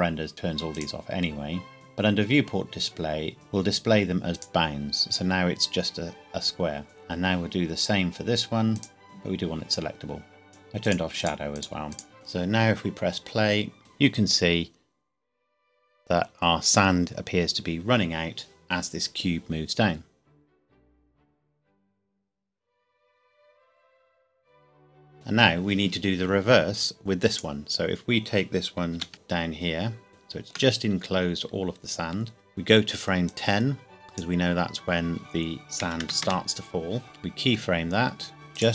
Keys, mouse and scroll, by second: 2.1 scroll down 1, 3.3 click, 7.3 click, 25.1 click, 25.6 scroll down 1, 27.3 click, 28.9 g, 29.1 z, 30.1 shift+middle click, 30.8 scroll up 1, 33.3 click, 35.8 KP_1, 36.0 KP_0, 36.2 KP_Enter, 37.5 i, 38.5 click.